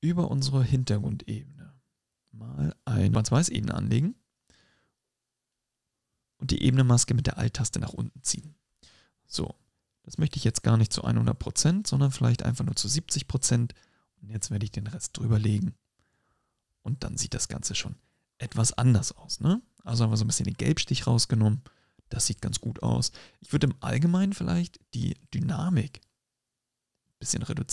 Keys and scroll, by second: 16.3 BackSpace.